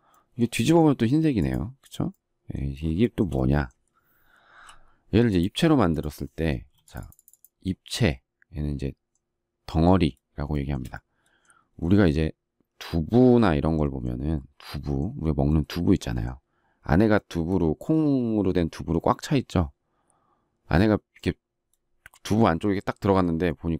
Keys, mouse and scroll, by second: 3.1 shift+middle click, 4.5 p, 6.6 space, 10.4 shift+middle click, 23.4 shift+middle click.